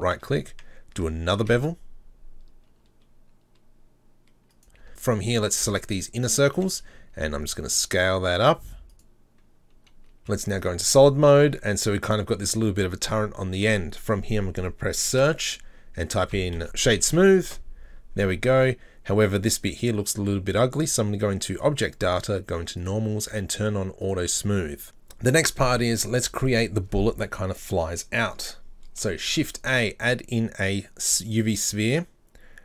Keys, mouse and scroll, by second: 1.4 ctrl+b, 4.9 alt+right click, 6.2 alt+shift+right click, 7.1 s, 10.8 scroll down 4, 10.8 z, 11.1 middle click, 11.5 Tab, 11.7-15.1 middle drag, 24.0 click, 24.9 z, 25.5-28.6 middle drag, 28.6 scroll down 2, 31.4 shift+a.